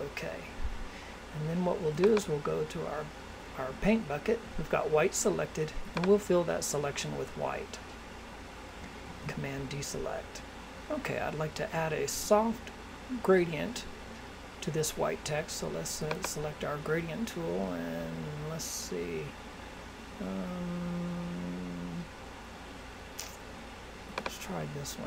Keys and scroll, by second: 9.0 super+d.